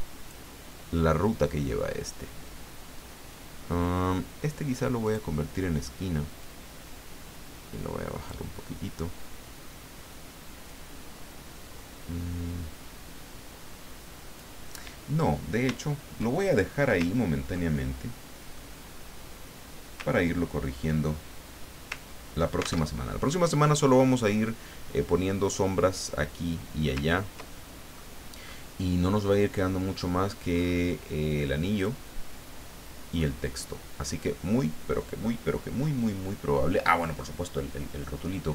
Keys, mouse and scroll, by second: 5.0 click, 6.4-8.8 drag, 10.7-14.8 drag, 15.8-16.4 ctrl+scroll down 2, 16.4 ctrl+click, 17.2-17.7 ctrl+scroll down 2, 17.7 ctrl+click, 20.1-20.7 ctrl+scroll up 2, 21.3 ctrl+scroll down 3, 22.0 ctrl+scroll down 2, 22.8 ctrl+alt+Tab, 27.6-28.8 ctrl+scroll down 6, 30.5-31.0 scroll up 1, 31.5 click, 33.1-33.8 scroll down 3.